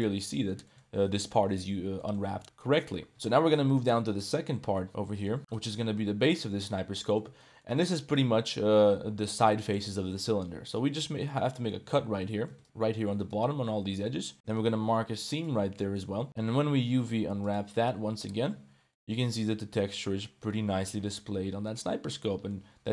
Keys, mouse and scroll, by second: 0.0 Tab, 0.0 click, 0.3 middle click, 0.6 shift+middle click, 2.0 middle drag, 2.4 middle click, 3.3 Tab, 3.3 middle click, 3.8 2, 4.1 right click, 4.8 middle click, 5.5 right click, 6.2 middle click, 6.9 middle click, 7.4 shift+middle click, 7.8 middle click, 9.2 middle click, 10.7 click, 11.2 shift+middle click, 11.5 middle click, 13.1 shift+click, 14.0 middle click, 14.4 u, 15.8 middle click, 16.2 a, 16.4 u, 18.5 Tab, 19.0-20.5 middle drag, 20.7-22.5 middle drag.